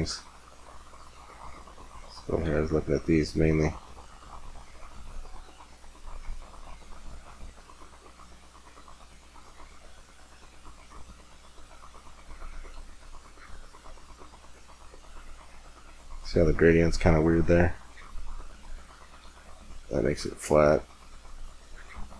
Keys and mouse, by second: 1.0-3.5 drag, 3.5 middle click.